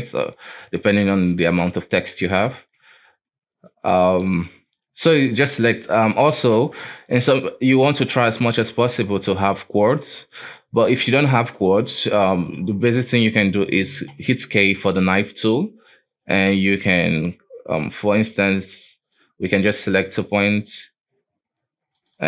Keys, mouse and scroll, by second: 0.3 shift+right click, 0.8 shift+middle click, 1.6 j, 2.2 alt+a, 2.5 right click, 3.0 shift+right click, 5.5 j, 6.2 alt+a, 6.7 shift+middle click, 7.0-9.1 scroll up 1, 9.7-10.8 scroll down 2, 10.8-11.6 scroll up 1, 11.6 shift+middle click, 11.9-14.3 scroll up 2, 14.3 k.